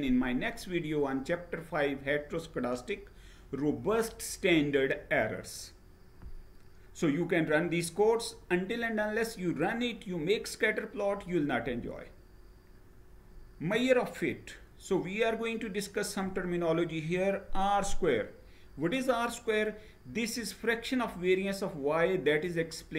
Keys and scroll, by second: 11.3 Right.